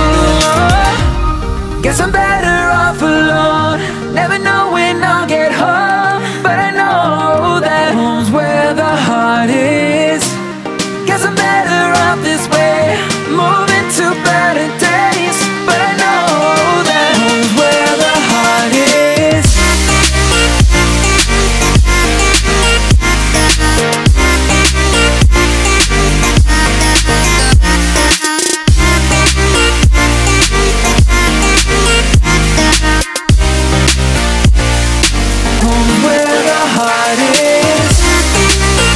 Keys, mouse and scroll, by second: 0.9 click, 4.2 click, 5.5 right click, 6.6 x, 8.7 click, 10.0 click, 11.8 right click, 13.0 Tab, 13.9 right click, 14.6 right click, 14.9 Tab, 16.0 right click, 17.2 click, 20.2-21.9 drag, 21.9 right click, 23.1-27.5 drag, 28.9 click, 32.3 right click, 33.4 click, 34.2 click, 35.6-36.8 drag.